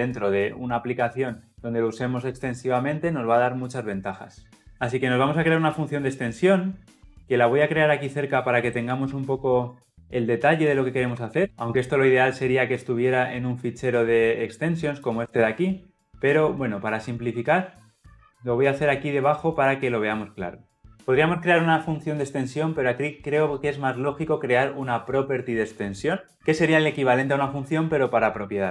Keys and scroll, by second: 8.9 ctrl+x, 11.4 ctrl+v, 16.6 ctrl+alt+Left.